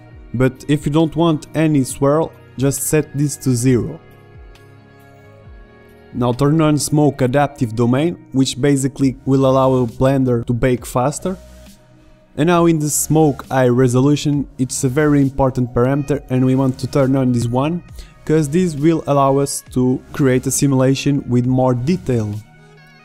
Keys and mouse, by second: 7.4-9.4 drag, 9.6-10.9 middle drag, 13.0 middle click.